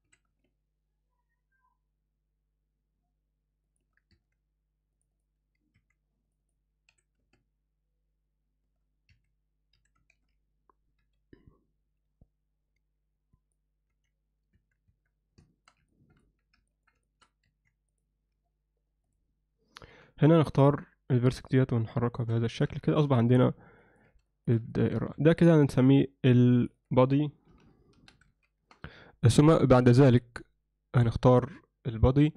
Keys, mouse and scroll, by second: 0.1 s, 4.2 Tab, 5.2 click, 5.9 3, 6.3 click, 6.5 click, 6.9 s, 9.8 s, 13.9 z, 14.6 Tab, 14.9 Tab, 15.5 shift+middle click, 15.9 ctrl+alt+middle click, 16.7 ctrl+alt+middle click, 17.1 shift+middle click, 17.5 1, 17.9 drag, 19.1 click, 20.0 g, 22.5 ctrl+alt+middle click, 22.9 alt+shift+middle click, 23.2 z, 23.8 ctrl+alt+middle click, 24.3 alt+shift+middle click, 24.8 middle click, 25.2 Tab, 26.6 click, 26.8 click.